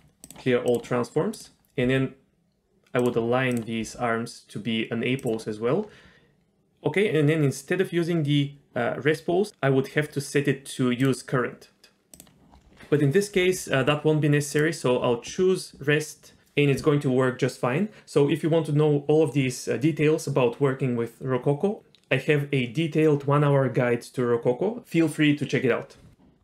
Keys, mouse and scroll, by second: 1.3 click, 1.8 r, 3.5 click, 3.8 r, 9.5 click, 11.0 click, 12.1 click, 14.5 click.